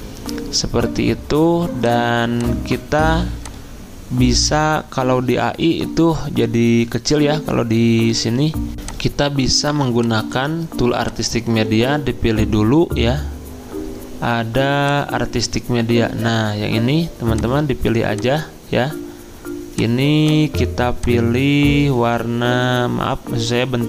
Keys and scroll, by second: 8.7 alt+Tab, 11.8 ctrl+z.